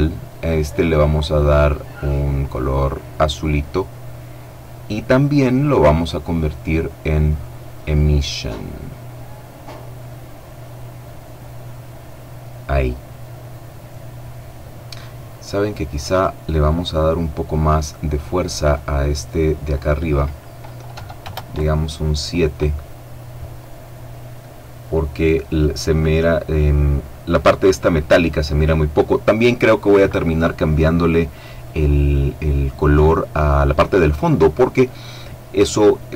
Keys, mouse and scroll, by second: 1.5 click, 5.3 click, 7.3 click, 15.4 right click, 17.6 click, 20.3 KP_7, 20.7 KP_Enter, 35.5 right click.